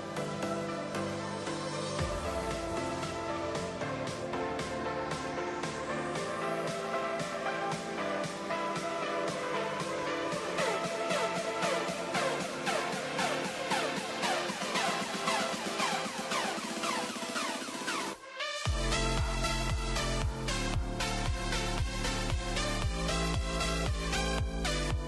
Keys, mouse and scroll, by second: 0.8 scroll down 1, 1.0-1.9 middle drag, 2.3 click, 2.5 middle click, 2.6-3.0 scroll down 1, 3.0 middle click, 3.4 click, 3.6-4.4 scroll down 4, 4.4 g, 4.7 click, 5.4-6.1 middle drag, 6.1 r, 6.5 click, 7.3-8.6 middle drag, 8.6 shift+d, 10.0 r, 10.2 click, 12.3-13.3 middle drag, 13.8 click, 14.5 middle click, 15.1 click, 15.9 click, 16.3 middle click, 16.7 KP_0, 18.0 drag, 18.7-21.2 drag, 23.2-25.0 shift+middle drag.